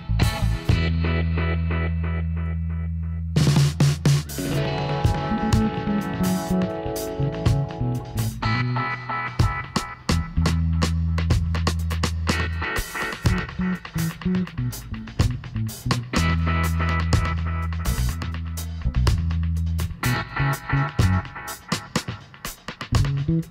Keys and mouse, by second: 2.6 ctrl+r, 3.9 right click, 4.7 middle click, 5.5 click, 6.4-8.9 drag, 7.2-8.3 right drag, 9.5 click, 11.2 right click, 11.3 click, 12.0-14.7 right drag, 12.3 g, 14.8-16.5 drag, 16.5-18.0 right drag, 17.2 g, 19.9 click, 22.4 click, 23.4-23.5 middle drag.